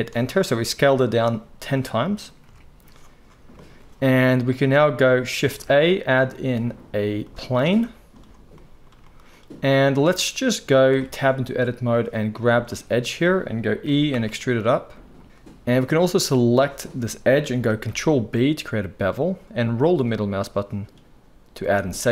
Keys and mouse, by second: 2.4 KP_1, 3.5-11.9 shift+middle drag, 5.4 shift+a, 10.9 Tab, 11.9 click, 13.8 e, 16.1 click, 17.8 ctrl+b, 18.0-22.1 middle drag.